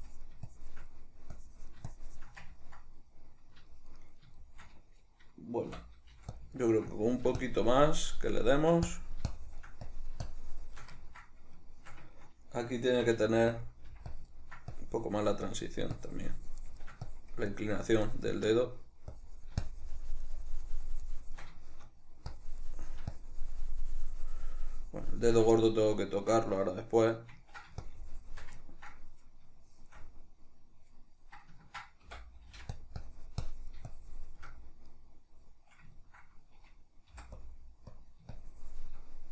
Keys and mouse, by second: 0.9 middle click, 1.4-2.5 drag, 2.5-6.4 ctrl+middle drag, 5.7 typing, 6.5 ctrl+middle click, 6.9-11.0 drag, 11.0-13.6 ctrl+middle drag, 12.9 c, 13.6 click, 13.9 f, 14.1 click, 14.3 ctrl+middle click, 14.7-18.5 drag, 18.5 middle click, 19.2-21.6 drag, 21.6 shift+middle click, 22.4-25.6 drag, 25.6-27.8 middle drag, 27.8 shift+click, 28.6-32.8 ctrl+middle drag, 32.1 i, 33.0-34.6 drag, 34.6-37.4 middle drag, 37.1 g, 37.4-39.1 drag, 39.1 middle click.